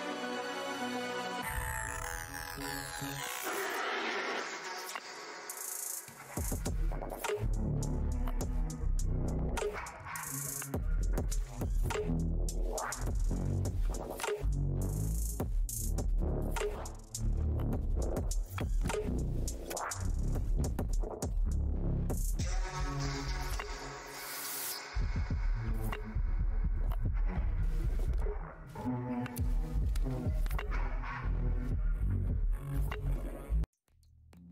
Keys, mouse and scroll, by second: 2.0 ctrl+Tab, 2.2 ctrl+w, 3.7 Tab, 3.7 scroll down 1, 7.2 scroll down 1, 8.1 scroll down 1, 9.0-9.6 scroll down 1, 13.5 ctrl+Tab, 15.5 right click, 17.6 click, 18.0 alt+Tab, 18.6 ctrl+Tab, 19.8 ctrl+v, 20.5 click, 21.1 alt+Tab, 21.6 ctrl+w, 23.2 right click, 24.1 click, 24.3 alt+Tab, 24.7 ctrl+v, 25.3 click, 25.9 Tab, 26.5 Tab, 28.1-28.6 scroll down 1, 28.6 scroll up 1, 31.9 Tab, 33.4 click.